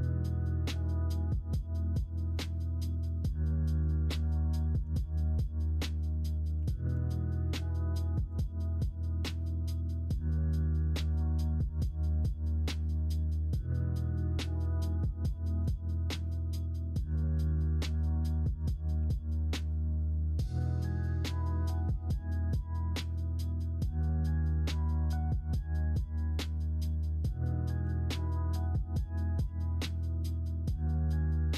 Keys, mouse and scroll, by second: 0.6 Tab, 1.2 Tab, 1.6 s, 4.5 shift+middle click, 4.6 shift+scroll down 1, 5.1 middle click, 5.7 scroll up 1, 6.0-6.5 scroll down 1, 6.5 r, 8.7 shift+middle click, 9.4 middle click, 10.3 middle click, 11.6 alt+z, 12.5 alt+z, 12.8 middle click, 14.6 m, 16.5 ,, 17.0 ,, 18.9 3, 21.2 ., 24.0 middle click, 24.0 ., 25.0 s, 26.5-27.8 middle drag, 27.8 s, 28.9 s.